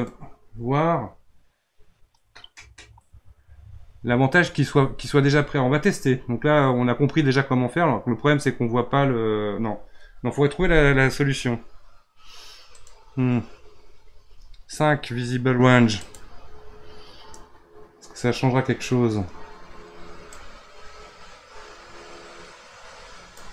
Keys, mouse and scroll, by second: 12.7-15.9 drag, 20.4-23.4 drag.